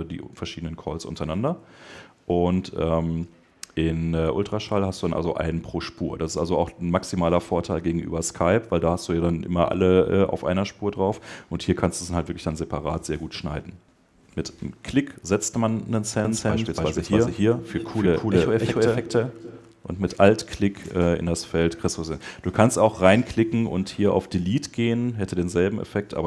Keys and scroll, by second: 2.9 super+Tab.